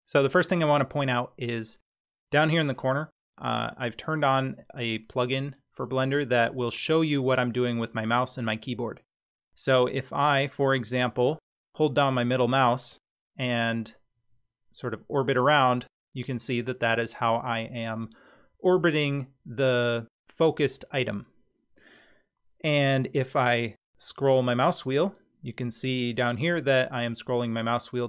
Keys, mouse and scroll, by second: 10.6-16.5 middle drag, 23.2-23.8 scroll up 3, 23.8-24.2 scroll down 4, 24.2 scroll up 3, 24.5-24.9 scroll down 4, 24.9-25.3 scroll up 3, 26.8-27.4 scroll down 2.